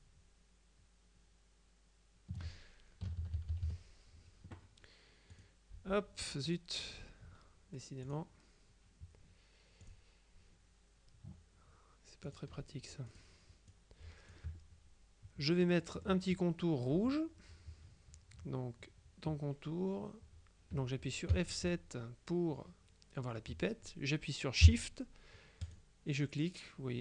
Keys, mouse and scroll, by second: 3.1 KP_Subtract, 5.4 click, 6.5 click, 8.1 click, 9.9 click, 12.3 click, 13.2 click, 15.6-16.7 middle drag, 21.4 F7, 25.7 shift+click.